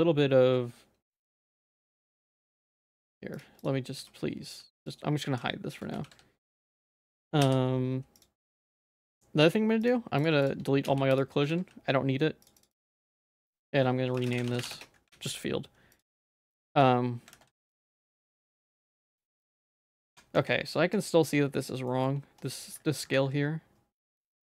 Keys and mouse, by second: 2.5 click, 5.4 h, 6.0 ctrl+z, 7.4 h, 9.0 click, 9.9 click, 10.9 x, 11.5 ctrl+s, 12.5 click, 13.5-14.8 drag, 15.2 ctrl+s, 15.9 click, 17.4 ctrl+s, 18.2 middle click, 20.1 Tab, 20.4 z, 20.8 click, 21.9 shift+middle click, 22.5 shift+middle click, 23.2 alt+s.